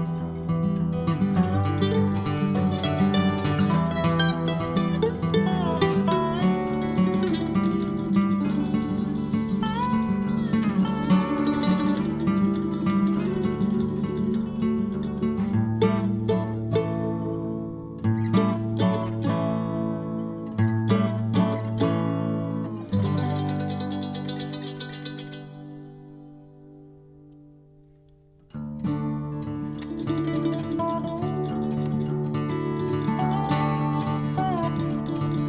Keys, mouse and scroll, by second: 1.6 KP_1, 2.7-4.0 drag, 4.0 n, 4.5-5.5 scroll up 1, 5.5-6.0 scroll up 9, 7.2 click, 8.5 click, 9.4 middle click, 10.3 click, 10.9 scroll up 1, 11.2 middle click, 11.7 scroll up 1, 11.9-13.5 middle drag, 15.1 click, 16.0 shift+click, 16.4 shift+click, 18.7 c, 28.3 middle click, 28.6 scroll down 1, 28.8 scroll up 1, 30.7 c, 34.3-35.4 middle drag.